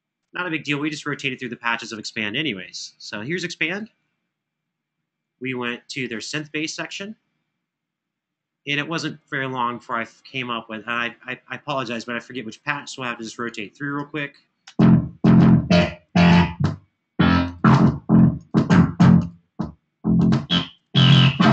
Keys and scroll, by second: 14.5 space.